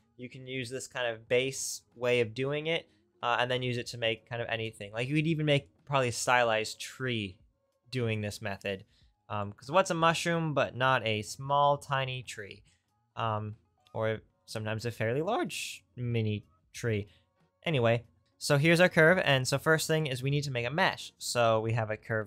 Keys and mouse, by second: 20.3 shift+a.